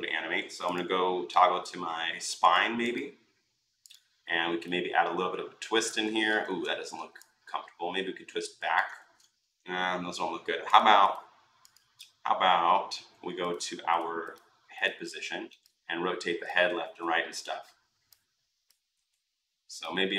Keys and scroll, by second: 6.2 ctrl+z, 8.8 ctrl+z, 16.6 ctrl+z.